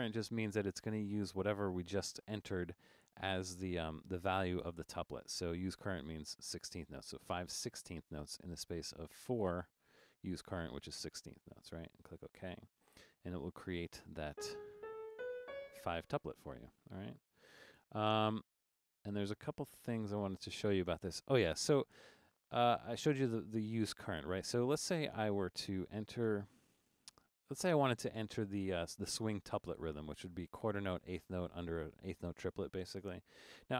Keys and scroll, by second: 10.0 4, 14.2-15.9 typing, 23.5 Down, 23.9 Down, 24.1 Down, 25.1 Up, 26.3 5.